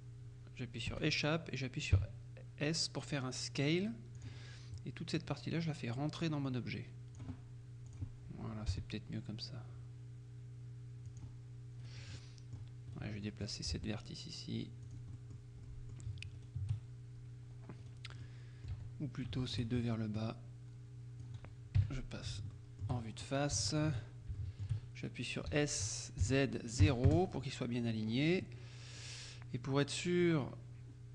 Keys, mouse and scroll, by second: 1.0 Escape, 2.0 s, 4.3 click, 5.3-7.7 drag, 8.0 click, 8.8 g, 11.1 click, 11.9 right click, 12.2 click, 13.0 right click, 13.8 g, 14.9 click, 15.2 right click, 16.5 shift+right click, 17.9 right click, 18.3 click, 18.8 z, 19.5 shift+right click, 20.3-21.8 drag, 21.9 KP_1, 22.6 shift+middle click, 23.1-23.6 shift+scroll up 3, 23.6 shift+click, 24.0-24.5 shift+scroll up 2, 24.5 shift+click, 24.9-25.4 scroll up 2, 25.6 s, 26.3 z, 27.1 KP_Enter, 27.7-28.7 scroll up 2, 28.9-29.5 scroll down 2.